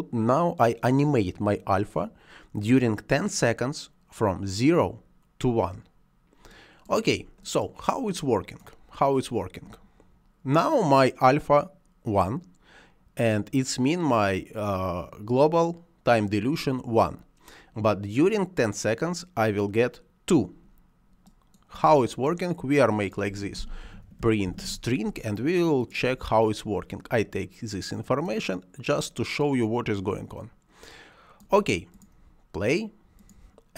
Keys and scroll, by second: 23.7 p, 24.1 i, 24.3 n.